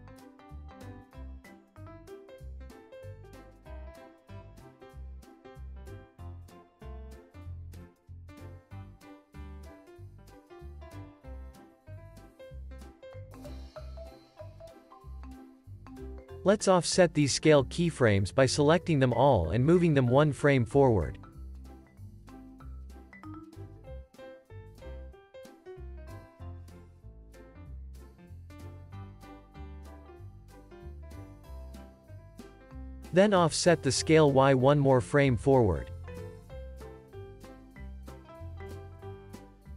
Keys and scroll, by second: 17.9 super+s, 20.2 alt+w, 26.3 space, 28.6 space, 29.0 super+s, 30.3 z, 34.1 alt+w, 37.3 space.